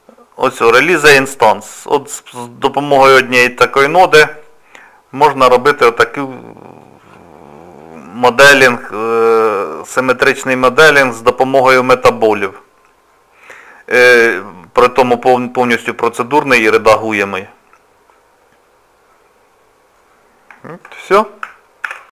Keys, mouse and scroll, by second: 5.5 click, 9.4 click, 10.5 click, 11.9 middle click, 12.6 middle click, 14.9 click, 16.2 middle click, 16.8 shift+middle click, 17.4 middle click, 20.2 scroll up 1, 20.2 scroll down 1, 20.6 shift+middle click.